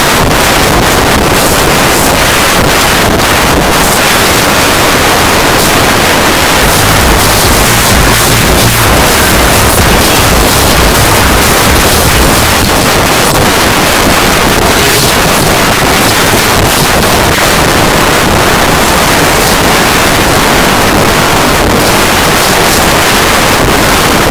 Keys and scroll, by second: 2.3 n, 2.6 Up, 2.7 Up, 2.8 Return, 12.5 Page_Down.